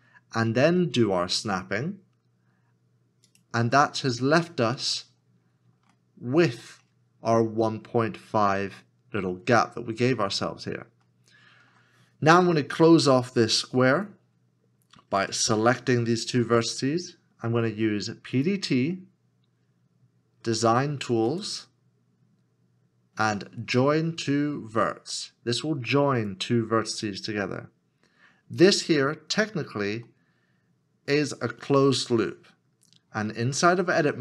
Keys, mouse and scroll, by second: 3.3 ctrl+click, 4.1 scroll up 1, 5.2 scroll down 1, 5.9 shift+middle click, 6.8 scroll up 1, 9.7 scroll down 1, 11.1 shift+middle click, 30.1 middle click.